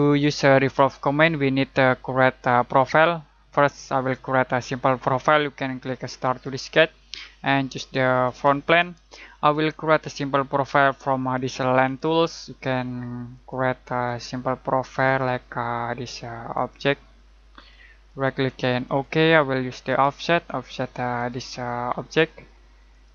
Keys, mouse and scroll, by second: 6.2 click, 11.8 click, 18.0 right click, 18.8 click.